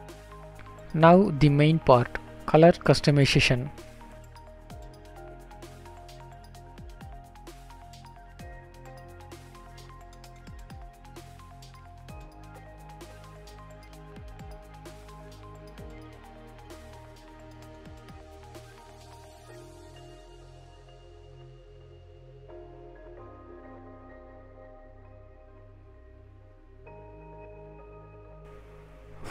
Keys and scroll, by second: 11.0 Return.